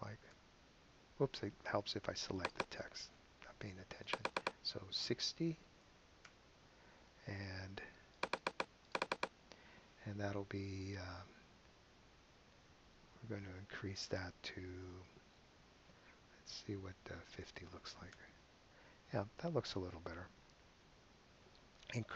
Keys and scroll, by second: 0.3 KP_Enter, 5.2-6.1 typing, 6.2 Home, 17.0-17.9 typing, 18.1 Return.